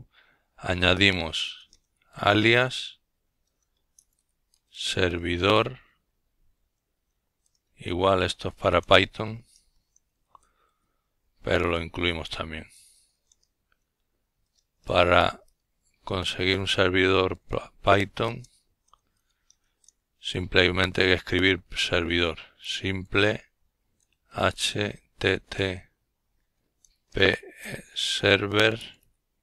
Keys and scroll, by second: 0.8 typing, 2.1-4.4 typing, 5.5-6.6 typing, 8.1-8.6 typing, 11.4-13.6 typing, 15.8 typing, 17.2-18.5 typing, 19.6-22.6 typing, 25.1-26.7 typing.